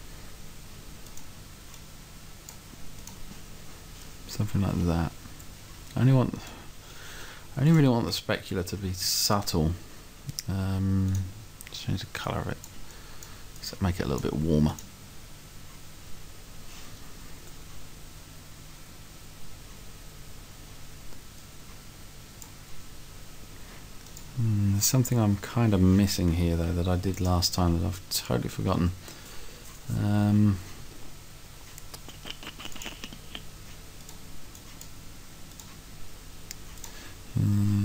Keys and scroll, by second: 8.5 Right, 9.0 Left, 27.5 Left, 28.7 Right.